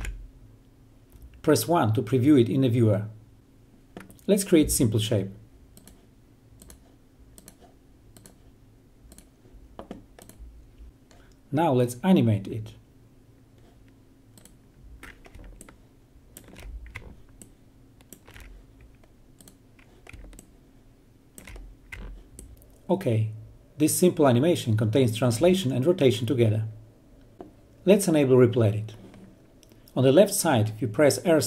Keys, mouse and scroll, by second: 0.0 o, 0.7-1.7 drag, 2.2 1, 5.6 click, 11.6 click, 13.0-13.9 ctrl+right drag, 14.8-15.6 ctrl+alt+right drag, 16.7 click, 17.7-19.0 ctrl+right drag, 19.7-20.6 ctrl+alt+right click, 22.5-24.8 drag, 30.8 click.